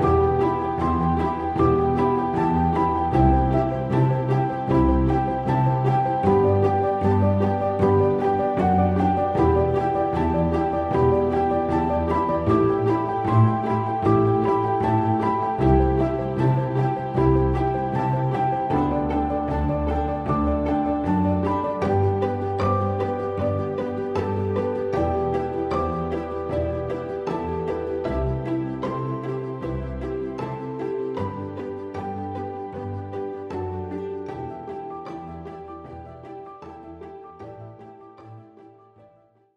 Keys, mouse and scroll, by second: 6.1 double click, 6.7 click, 11.4 double click.